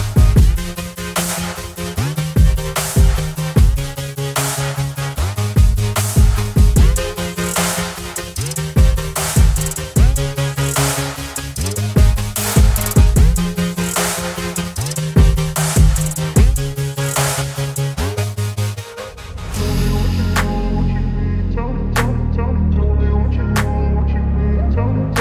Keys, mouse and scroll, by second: 9.3 ctrl+g, 12.5 ctrl+g, 12.7 ctrl+j, 15.0 ctrl+e, 17.3 click, 18.0 right click, 19.9 click, 21.9 ctrl+t, 23.6-25.2 drag, 24.1-25.2 shift+drag.